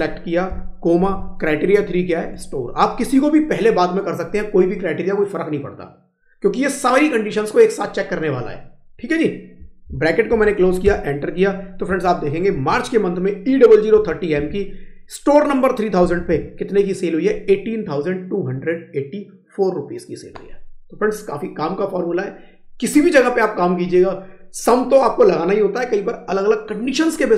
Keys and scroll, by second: 11.8 Up, 12.4 Left, 13.8 Left, 14.3 Left, 16.0 Right.